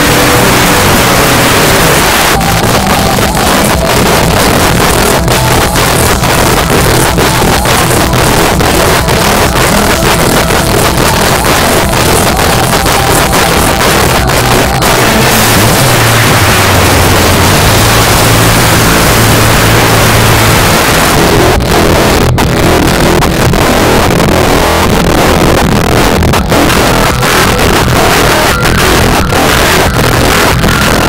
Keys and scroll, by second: 2.0 Page_Down, 20.7 Page_Down.